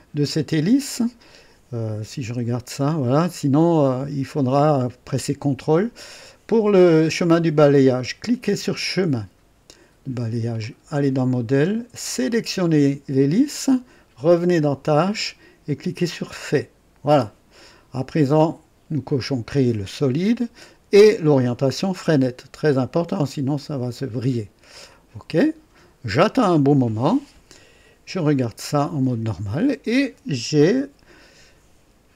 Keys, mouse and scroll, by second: 2.2 &, 8.2 click, 10.5 click, 12.1 click, 14.3 click, 16.3 click, 19.2 click, 23.5 click, 24.8 click, 28.3 &.